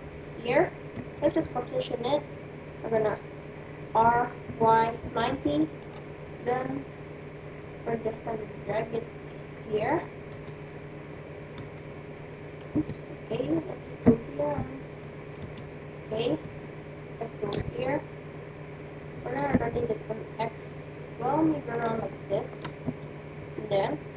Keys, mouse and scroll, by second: 0.9 KP_1, 3.7 r, 8.3-9.5 drag, 9.7 click, 10.4 KP_1, 11.5 KP_1, 12.7 KP_3, 14.1-15.9 middle drag, 15.3 KP_3, 16.6-18.6 middle drag, 19.0 r, 22.0-24.1 middle drag, 22.8 KP_1.